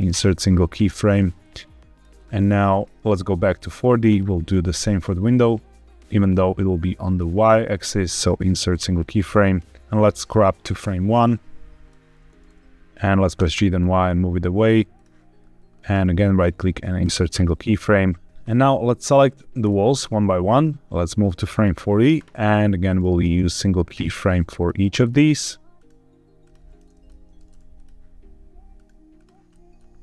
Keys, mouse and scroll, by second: 1.3-2.0 drag, 2.5-3.6 scroll up 3, 3.6 click, 7.0-8.7 right drag, 9.1-9.8 scroll down 2, 10.1-11.8 drag, 13.3 g, 13.4 y, 14.8 click, 15.8-17.0 right drag, 18.2 click, 19.5 click, 20.5-21.6 drag, 22.8-23.9 right drag, 24.5 click, 24.9 click, 25.6 right click, 27.0-27.5 middle drag, 27.6 click, 28.6 right click, 29.4 middle click.